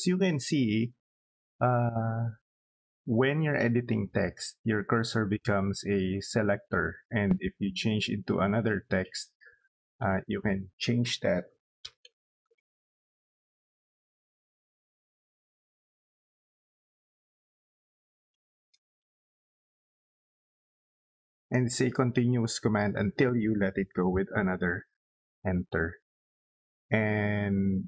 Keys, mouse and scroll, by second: 7.9 click, 11.1-12.4 typing, 13.2 click, 15.2 click, 17.4-19.8 typing, 21.1 click, 23.6 Return.